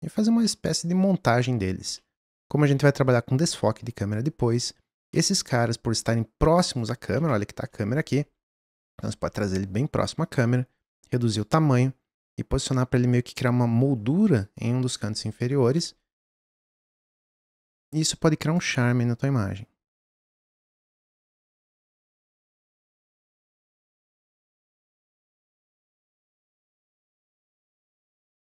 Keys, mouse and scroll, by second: 0.5-1.2 middle drag, 1.2-1.6 scroll up 1, 1.6-2.0 scroll down 1, 2.0-5.0 middle drag, 5.1-6.9 middle drag, 6.8 click, 7.3 shift+middle click, 8.0 click, 10.9 s, 11.8 g, 18.3 shift+d, 19.8 ctrl+z, 20.6 Delete, 20.9 ctrl+z, 21.2 alt+d, 21.6-24.8 typing, 21.9 click, 23.3 click, 26.1 s, 26.6 g.